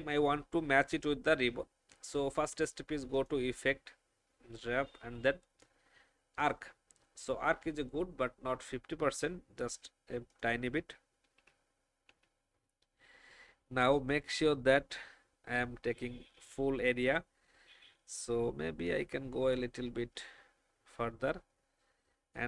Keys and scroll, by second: 11.3 shift+Down, 12.0 shift+Down, 15.8 alt+shift+Down.